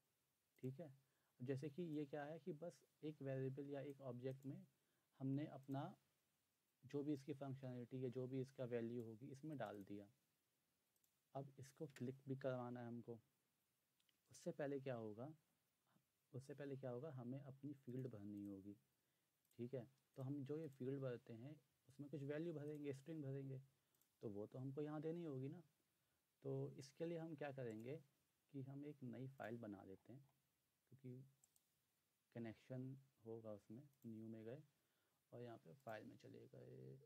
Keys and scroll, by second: 11.9 Return.